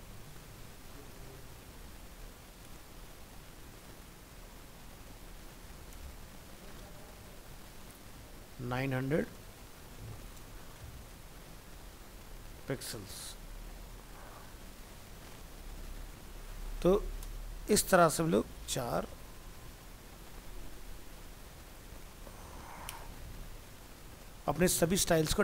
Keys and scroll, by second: 0.5 ctrl+shift+Left, 1.3 ctrl+x, 15.2 ctrl+s, 16.4 alt+Tab, 23.2 ctrl+s, 23.6 alt+Tab.